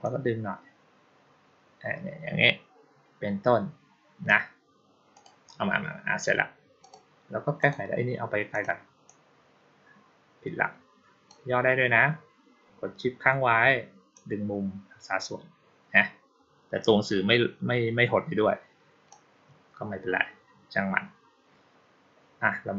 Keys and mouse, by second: 5.0 click, 6.7 click, 7.5 click, 8.4 click, 8.9-11.1 drag, 14.0-18.9 shift+drag.